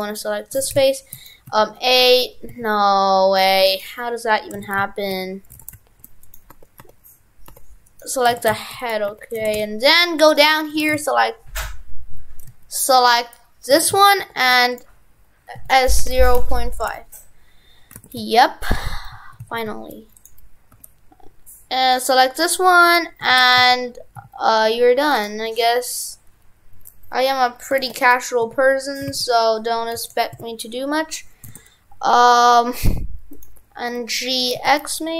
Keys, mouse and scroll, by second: 0.1 right click, 0.6 shift+f, 3.7 right click, 4.6 shift+f, 5.6 shift+f, 6.6 Tab, 7.9 right click, 8.3 shift+f, 9.1 Tab, 9.4 shift+f, 10.9 shift+f, 13.3 right click, 13.7 shift+f, 17.9 shift+f, 23.4 shift+f.